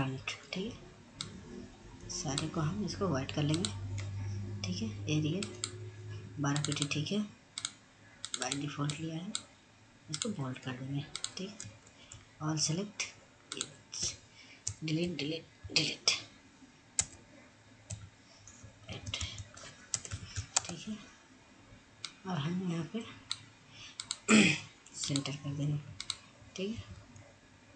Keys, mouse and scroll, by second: 4.9 click, 11.3 ctrl+a, 12.8 click, 14.0 Delete, 16.4 BackSpace, 17.4 Delete, 18.4 shift+a, 19.5 BackSpace, 19.6 a, 20.1 ctrl+space, 21.6-26.2 drag, 26.2 c, 26.8 scroll down 1, 27.4 click.